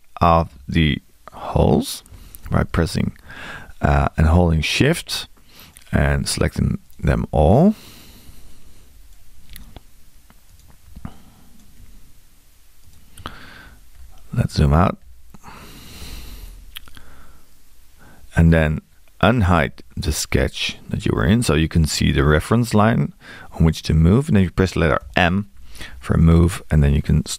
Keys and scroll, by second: 25.0 m.